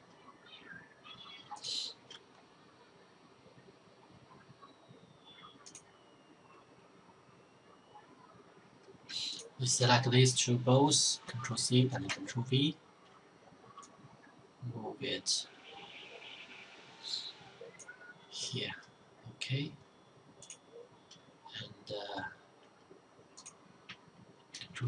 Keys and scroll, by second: 10.5 ctrl+c, 11.1 ctrl+v, 23.8 ctrl+c, 24.1 ctrl+v.